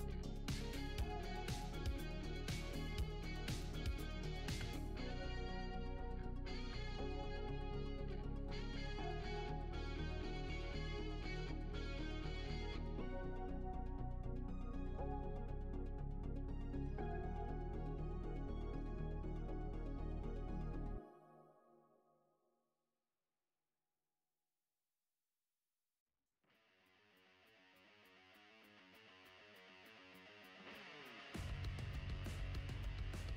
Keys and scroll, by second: 0.0-1.1 typing, 2.5 shift+a, 3.1 d, 3.8 shift+w, 5.2-5.9 typing, 7.5-10.0 typing, 14.0 ctrl+c, 14.4 w, 15.8 Return, 16.7-17.9 typing, 20.0-24.3 typing, 25.8-28.8 typing, 31.1 r.